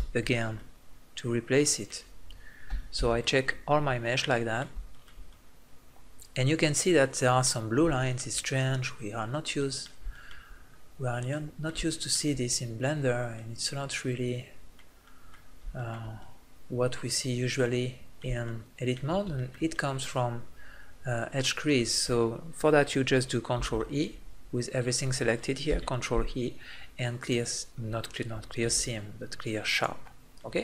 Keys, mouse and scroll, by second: 0.2 click, 0.6 right click, 1.0-2.7 middle drag, 2.7 a, 3.0 a, 7.3 middle click, 9.6 middle click, 9.9 click, 14.7 click, 15.0 middle click, 19.9-23.6 middle drag, 23.6 ctrl+e, 25.7 ctrl+e, 28.7 ctrl+e, 30.4-30.6 middle drag.